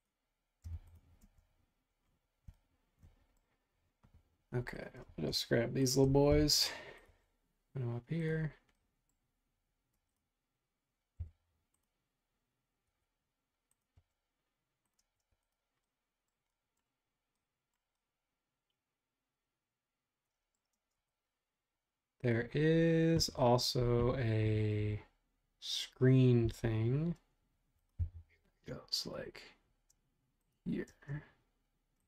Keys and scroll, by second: 0.7 b, 1.2 space, 6.3 m, 10.0 space, 11.2 m, 13.0 Escape, 15.0 space, 15.1 Escape, 16.5 ↺, 20.7 space, 26.4 r, 28.1 BackSpace, 30.8 space.